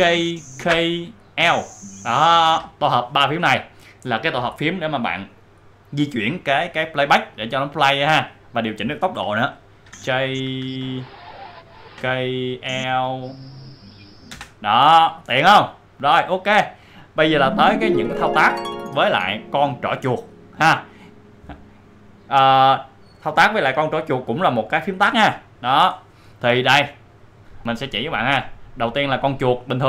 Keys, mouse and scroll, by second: 0.9-2.5 typing, 9.8 typing, 11.1-14.2 typing.